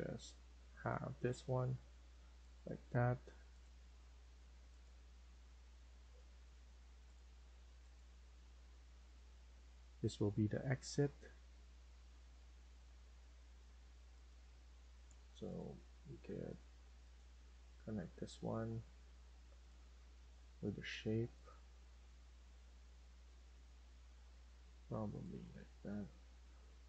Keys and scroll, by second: 1.6 Escape.